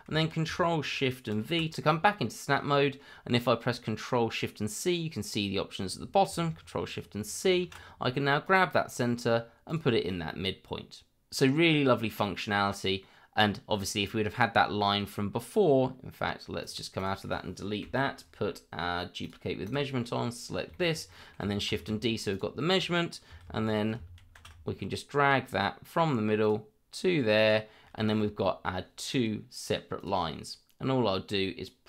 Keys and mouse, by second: 1.3 ctrl+shift+v, 7.2 ctrl+shift+c, 8.4 click, 9.7 click, 10.3-11.4 middle drag, 12.3-13.1 middle drag, 16.6-16.9 right drag, 16.9 click, 17.8 Delete, 19.2 click, 19.6 click, 20.0 middle drag, 20.7 shift+middle click, 21.1 middle click, 21.7 shift+d, 23.7 ctrl+shift+v, 24.2 ctrl+shift+c, 26.4 click, 27.4 click, 28.1 shift+middle drag, 28.4 middle click, 30.0 click.